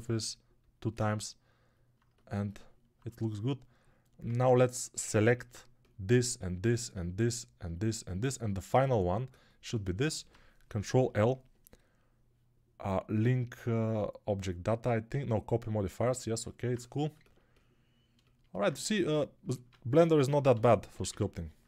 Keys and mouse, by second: 2.3-21.6 alt+middle drag, 4.1 ctrl+Tab, 10.8 ctrl+l, 19.4 ctrl+Tab, 20.4 g, 20.8 ], 20.9 ].